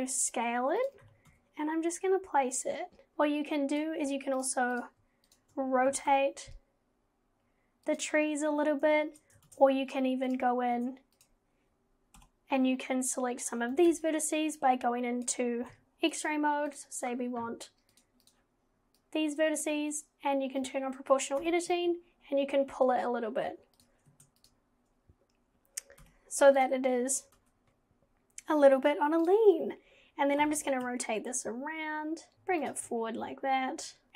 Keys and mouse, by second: 1.0 g, 3.1 g, 3.3 click, 5.9 g, 9.5 ctrl+z, 10.3 click, 10.7 Tab, 12.2 /, 13.9 alt+z, 14.3-15.3 drag, 15.7 KP_1, 17.9 click, 19.1 click, 20.6 click, 21.4 g, 24.1 Tab, 26.0 /, 27.4 alt+z, 29.2 click, 30.4 g, 32.3 z.